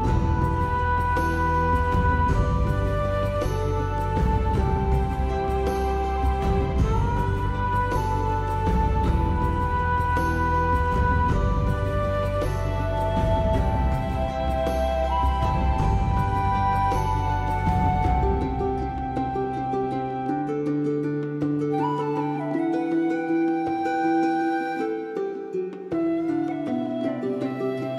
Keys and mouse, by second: 1.1 right click, 1.2 g, 1.5 click, 2.0 click, 2.2 g, 2.4 right click, 2.7 click, 2.8 g, 3.6 click, 3.8 shift+middle click, 4.2 click, 4.6 alt+middle click, 5.3 shift+middle click, 5.8 right click, 5.9 g, 6.0 middle click, 6.2 click, 6.6 g, 7.2 middle click, 7.3 shift+middle click, 7.7 alt+z, 7.9 shift+middle click, 8.3 shift+click, 8.9 shift+click, 9.8 shift+click, 10.3 shift+click, 10.6 alt+z, 11.2 click, 11.4 g, 11.4 middle click, 11.9 click, 12.3 g, 13.3 click, 13.5 click, 13.8 alt+z, 13.9 g, 14.2 click, 14.3 middle click, 14.8 click, 15.0 middle click, 15.8 middle click, 16.1 Tab, 16.4 shift+middle click, 16.6 middle click, 16.8 alt+middle click, 17.0 alt+middle click, 17.2 shift+middle click, 17.5 Tab, 17.9 middle click, 18.3 middle click, 19.1 k, 20.5 middle click, 21.4 middle click, 21.9 alt+middle click, 22.0 alt+middle click, 22.4 g, 22.8 click, 23.2 g, 23.3 click, 24.1 middle click, 24.5 click, 24.9 click, 24.9 g, 25.2 g, 25.4 click, 25.7 g, 25.9 click, 26.1 middle click, 26.8 Tab, 26.9 alt+click, 27.1 alt+middle click.